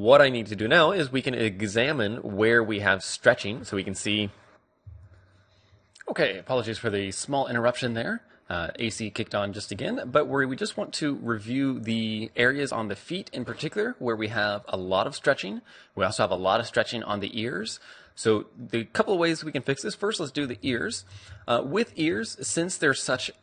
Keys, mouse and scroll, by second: 3.6 d, 3.8-4.8 drag, 4.2 d, 5.8-12.1 middle drag, 12.3-12.7 scroll down 1, 12.7-15.4 middle drag, 17.7-20.4 middle drag, 20.5 Tab, 20.8-23.4 middle drag, 22.0 a.